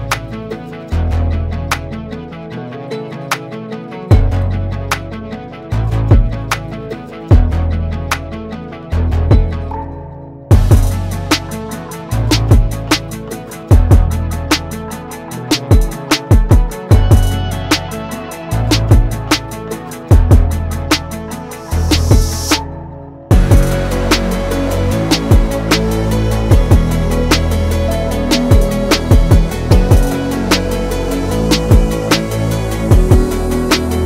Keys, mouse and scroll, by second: 1.3-1.6 typing, 2.2 Return, 6.0 click, 9.4 click, 11.0-12.1 typing, 12.4 Return, 14.6 click, 16.4 right click, 16.8-21.6 drag, 26.9 ctrl+c, 27.1 ctrl+f, 27.8-32.9 alt+shift+drag.